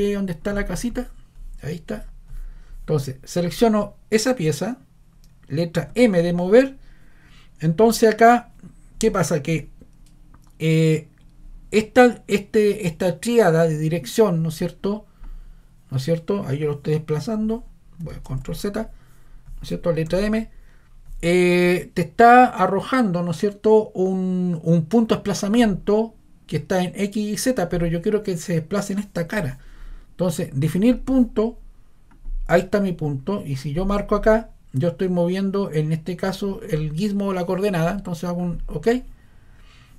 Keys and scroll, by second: 5.8 m, 18.3 super+z, 20.1 m.